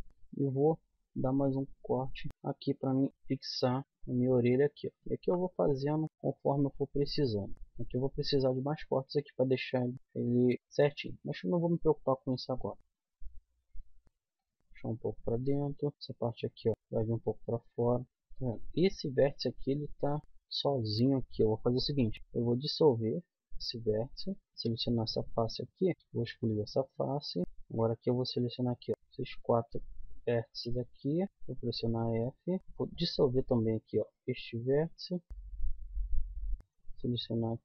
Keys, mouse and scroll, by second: 0.4 middle click, 1.0 k, 3.8 click, 5.1 a, 5.8-7.1 middle drag, 7.5-9.6 middle drag, 10.9-12.9 middle drag, 15.7-18.0 middle drag, 18.9 middle click, 21.8 x, 24.6-25.8 middle drag, 25.6 click, 26.0 x, 28.5 click, 28.9 right click, 29.1-30.4 drag, 30.4 middle click, 30.7 click, 31.0 right click, 31.3 f, 32.6 middle click, 32.7 x, 34.9-36.4 middle drag, 36.6 z, 37.2 click.